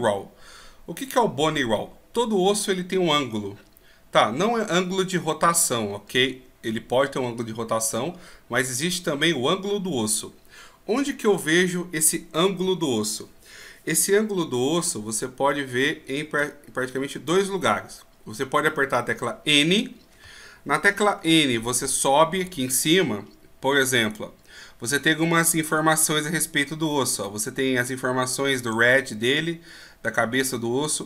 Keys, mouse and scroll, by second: 16.4 click, 19.6 n, 20.8-22.4 scroll up 16, 22.4-22.8 scroll up 3, 24.1 right click.